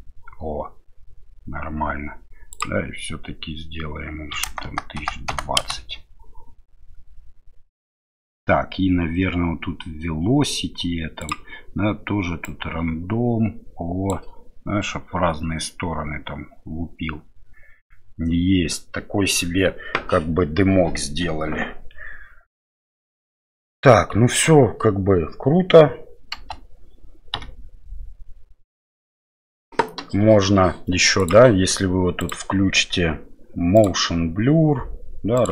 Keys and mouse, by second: 2.5-6.2 drag, 4.6 KP_0, 6.2 KP_0, 11.2 click, 12.5-14.1 drag, 26.3 space, 32.3 click, 33.8 click, 35.4 click.